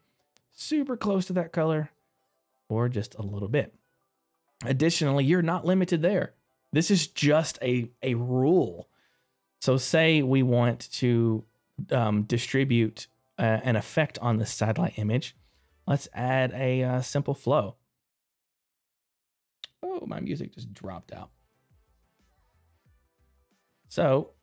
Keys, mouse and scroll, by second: 3.5 middle click, 4.6 right click, 5.0 middle click, 10.2 click, 18.5 middle click, 18.5 click, 20.5 click, 22.3 middle click, 22.8 scroll up 1, 23.2 middle click.